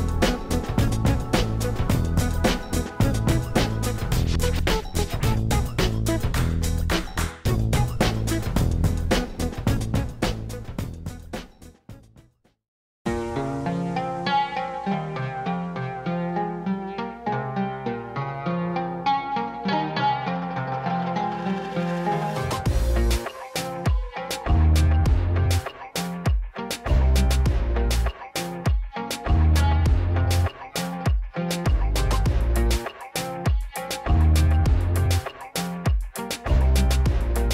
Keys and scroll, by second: 2.6 1, 4.0 g, 8.0 ctrl+r, 10.1 s, 14.6 2, 18.0 ctrl+b, 21.7 shift+z, 26.8 3, 28.2 i, 29.8 g, 30.2 z, 31.6 e, 37.0 Tab.